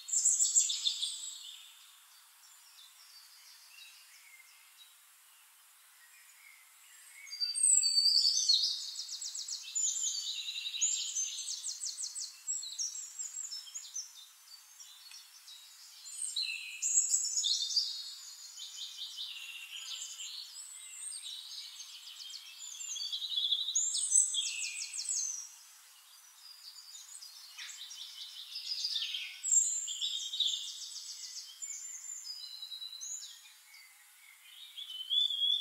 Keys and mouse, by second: 2.1-4.0 drag, 4.4 ctrl+z, 5.0-9.6 drag, 11.6 shift+drag, 12.5 click, 13.4 drag, 14.4 click, 15.0 click, 16.6 click, 17.5 click, 19.6 click, 20.0 middle click, 20.4 click, 22.0-28.1 drag, 29.3 click, 29.7 click, 31.2 click, 32.0-35.6 drag.